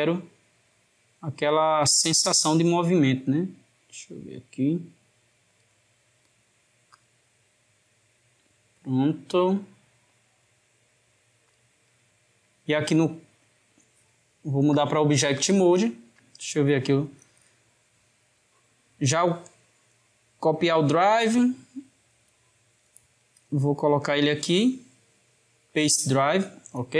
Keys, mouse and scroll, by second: 5.5 click, 6.9 click, 11.4 click, 14.8-17.8 drag, 19.5-22.2 right drag, 22.2 click, 24.1-26.9 right drag.